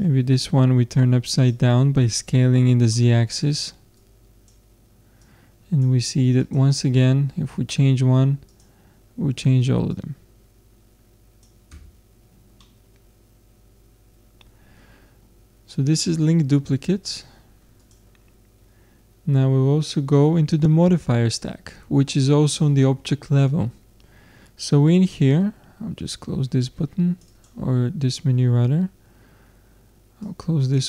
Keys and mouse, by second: 0.0-1.7 drag, 4.0-8.1 drag, 6.8 Tab, 8.6-11.5 drag, 11.7 Tab, 12.2-14.7 middle drag, 15.4-17.8 middle drag, 17.8-19.5 drag, 26.6-29.3 drag, 30.2-30.8 drag.